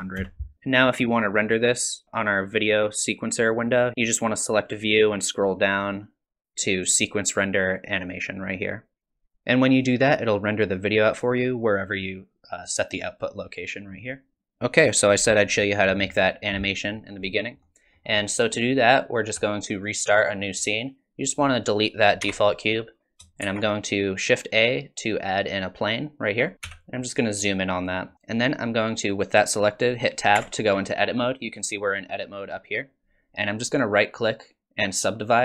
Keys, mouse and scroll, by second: 17.6 middle click, 18.2 middle click, 21.4 click, 22.2 x, 23.4 shift+a, 26.6 KP_Decimal, 27.5 middle click, 30.4 Tab, 34.1 right click.